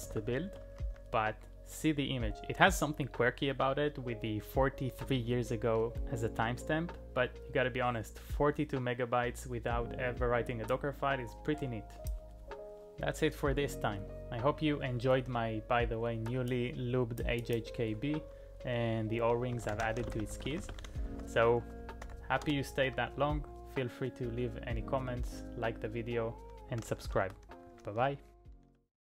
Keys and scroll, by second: 0.0-0.2 typing, 0.5 Return, 4.6 q, 19.3-23.0 typing, 26.4-28.9 typing.